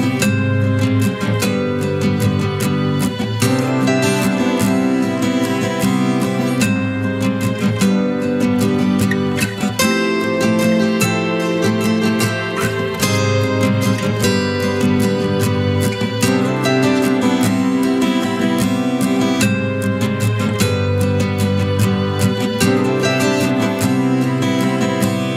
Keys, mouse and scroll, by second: 4.3 space, 5.7 alt+click.